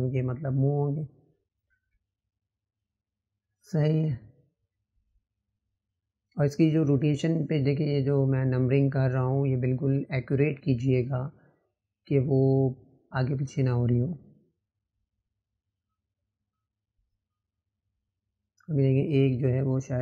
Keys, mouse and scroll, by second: 6.8-12.8 drag, 17.2 shift+click, 18.8 click.